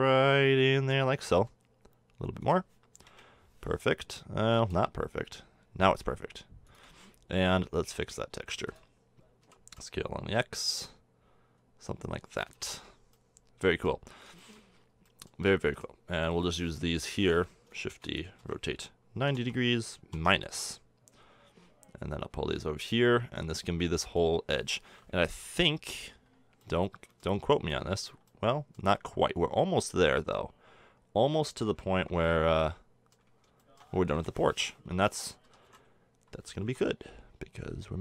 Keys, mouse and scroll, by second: 1.1 s, 3.0 KP_1, 4.4 s, 7.4 Tab, 7.4 q, 8.5 b, 9.4 s, 12.4 a, 12.5 Tab, 16.9 KP_7, 17.9 shift+d, 18.4 r, 21.5-22.1 middle drag, 22.1-23.9 drag, 25.7 KP_3, 26.3-26.6 middle drag, 29.2-30.0 middle drag, 30.0-32.2 drag, 32.2-34.1 middle drag, 34.1 KP_7, 35.4 s.